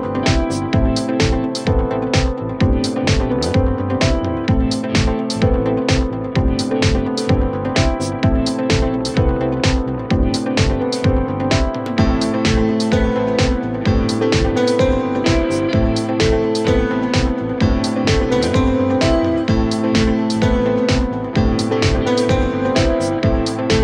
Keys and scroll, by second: 9.5 KP_Add, 10.7 Left, 11.0 Up, 16.4 ctrl+z.